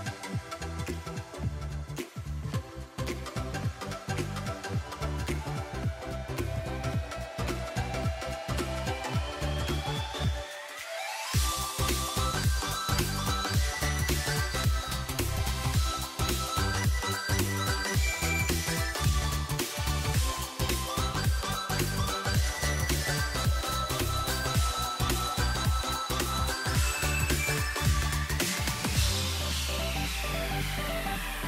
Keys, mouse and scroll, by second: 2.5-2.9 scroll down 3, 2.9 scroll up 3, 3.2 g, 4.5 scroll down 2, 4.7-6.2 middle drag, 7.9-9.0 drag, 9.3 click, 9.9-10.5 drag, 10.5 Tab, 11.0 click, 11.5-13.3 drag, 13.8-16.1 drag, 16.7-17.4 scroll down 3, 17.4 click, 17.8 click, 18.5 scroll down 1, 18.6 middle click, 18.7-19.7 scroll up 6, 19.7-20.7 scroll up 1, 20.7 click, 21.6 scroll down 4, 21.7-23.2 middle drag, 25.0 KP_1, 25.5 z, 26.0 shift+middle click, 26.3 Tab, 27.1 a, 27.2 a, 27.7 k.